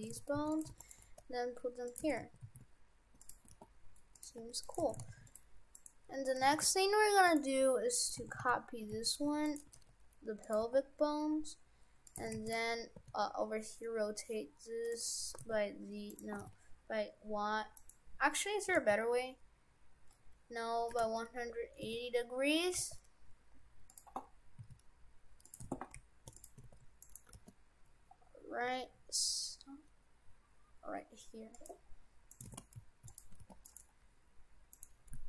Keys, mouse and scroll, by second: 0.0 shift+f, 0.7 shift+d, 1.0 g, 2.1 shift+f, 3.5 g, 4.4 Tab, 4.7 right click, 4.9 shift+f, 5.8 right click, 6.1 Tab, 6.5 shift+f, 8.1 right click, 8.3 shift+f, 9.3 shift+d, 9.7 g, 10.6 g, 12.2 shift+f, 13.0 r, 15.3 r, 16.4 r, 18.7 r, 21.7 r, 22.7 g, 24.6 s, 25.7 shift+f, 26.7 shift+d, 27.3 g, 32.3 right click, 32.5 shift+f, 33.3 g, 34.7 right click.